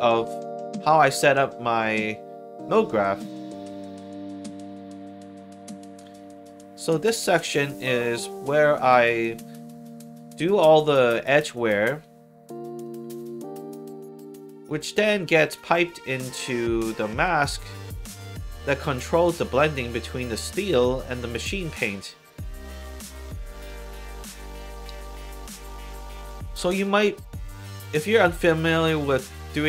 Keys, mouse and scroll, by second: 0.1 alt+right click, 1.4 alt+middle click, 2.6 scroll down 2, 2.9 middle click, 4.0 middle click, 5.7 middle click, 6.8-9.0 drag, 13.5 scroll up 2, 14.2 middle click, 14.8-16.0 scroll up 2, 16.0 middle click, 17.1 click, 18.7 click, 19.5 click, 20.3 click, 21.3 click, 24.8 click, 26.4 click.